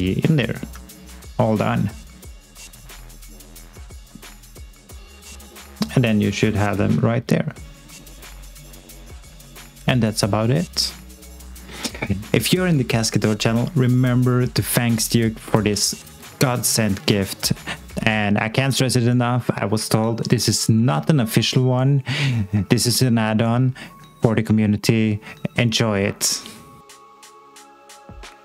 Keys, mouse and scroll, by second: 11.5 click, 17.9 click.